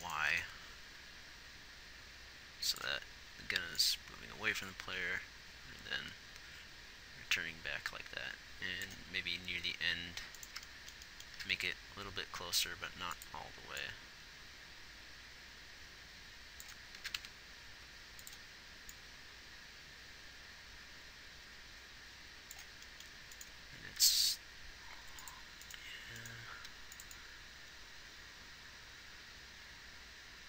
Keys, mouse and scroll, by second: 0.3 g, 10.1 g, 11.4 g, 24.0 g, 26.5 g.